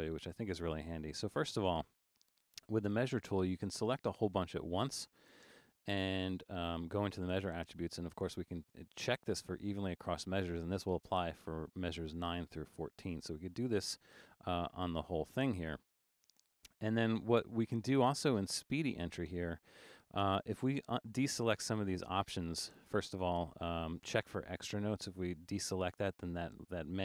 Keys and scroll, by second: 5.5 Return.